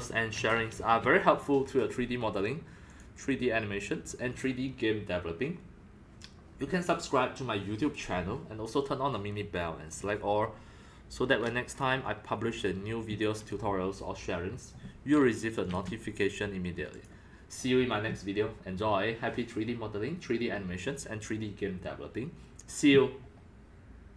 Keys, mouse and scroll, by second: 3.0 click, 9.9 click, 10.0-22.1 drag.